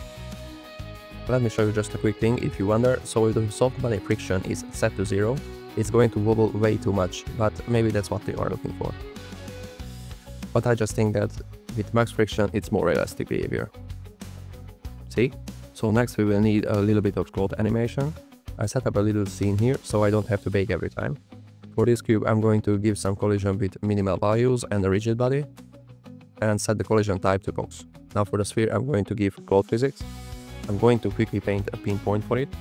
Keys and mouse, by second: 0.4 space, 1.9 click, 4.6 click, 8.3 click, 11.8 click, 16.2 shift+a, 18.0 g, 18.0 z, 18.2 shift+a, 19.4-21.4 typing, 21.6 shift+click, 23.6 click, 24.8 click, 26.5-26.9 drag, 27.6 click, 32.4 click.